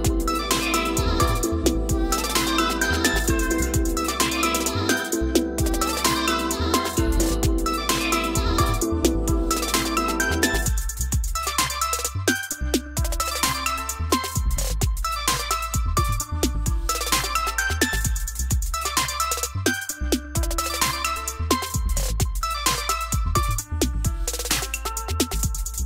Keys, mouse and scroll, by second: 4.8-5.8 middle drag, 7.0 click, 7.5 click, 9.2 click, 15.2-16.9 drag, 21.0-22.4 drag, 25.3 click.